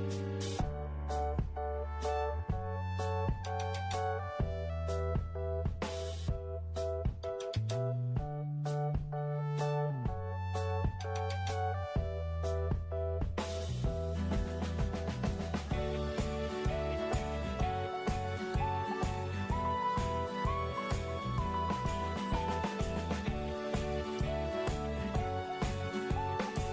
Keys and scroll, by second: 17.1 ctrl+g, 23.6 f.